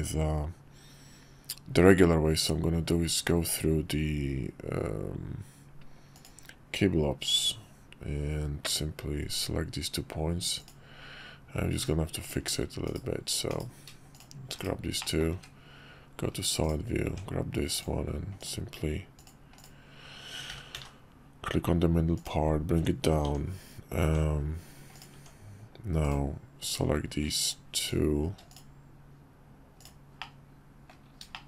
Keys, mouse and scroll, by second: 12.9 /, 13.5 /, 15.0 middle drag, 15.3 `, 17.0 Tab, 17.7 click, 19.2 click, 20.5 g, 22.7 Tab, 24.9 click, 28.5 click, 30.2 middle click, 31.3 shift+middle click.